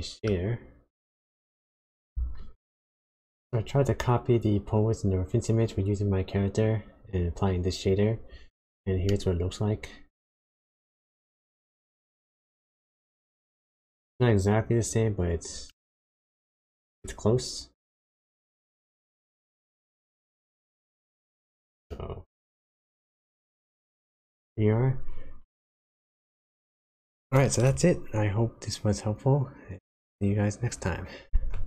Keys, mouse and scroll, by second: 0.5-1.1 scroll down 2, 1.1 middle click.